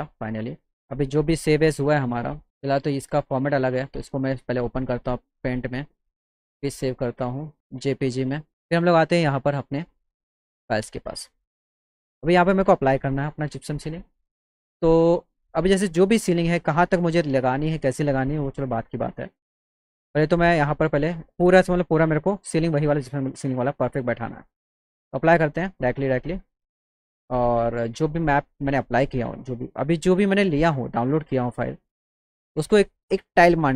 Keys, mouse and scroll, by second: 0.9 click, 2.2 click, 2.8 click, 4.2 click, 5.4 click, 7.5 click, 8.0 click, 10.5 click, 19.9 click, 22.8-23.1 drag, 24.3 click, 24.6 click, 26.3 click, 27.8 click, 29.3 click, 31.3 click, 31.5 click.